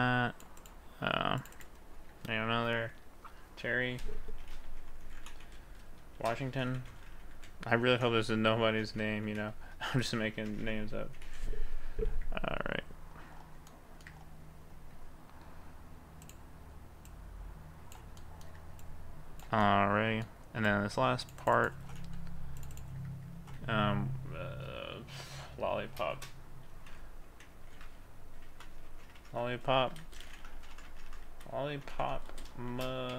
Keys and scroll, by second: 4.4 shift+c, 5.6 space, 6.2 shift+w, 8.5 BackSpace, 9.6 m, 10.1 m, 10.5 BackSpace, 23.8 a, 26.2 shift+l, 29.2 BackSpace, 30.1 BackSpace, 30.6 BackSpace, 32.3 space, 32.7 shift+m.